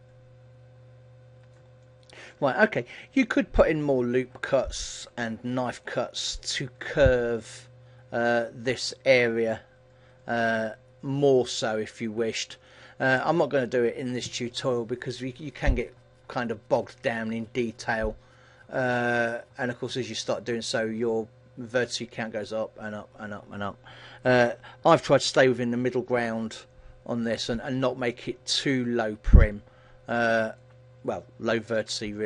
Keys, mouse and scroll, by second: 2.0 shift+middle click, 2.7-3.4 scroll up 5, 3.4 middle click, 4.5 middle click, 5.6-6.1 scroll up 3, 6.0 shift+middle click, 11.0-11.7 scroll down 5, 11.7 middle click, 12.4-13.2 scroll down 2, 12.7 middle click, 28.6 middle click, 31.1-31.8 scroll up 3, 31.8 shift+middle click, 31.8-32.2 scroll up 1.